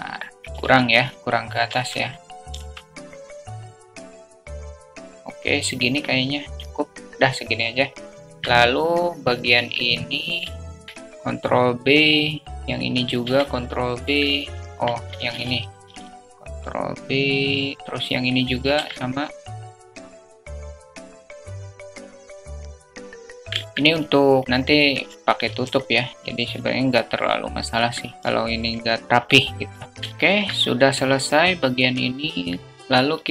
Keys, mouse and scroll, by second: 1.5 `, 1.8 click, 2.3 `, 3.7 alt+z, 8.1 alt+z, 10.8 ctrl+b, 10.8 2, 13.0 ctrl+b, 14.1 alt+click, 15.1 click, 18.2 click, 20.3 ctrl+b, 20.9 Tab, 21.2 alt+click, 21.5 middle click, 22.0 ctrl+b, 22.5 alt+click, 23.4 click, 25.1 3, 27.7 x, 29.8 alt+z, 29.8 Tab, 30.0 alt+shift+click.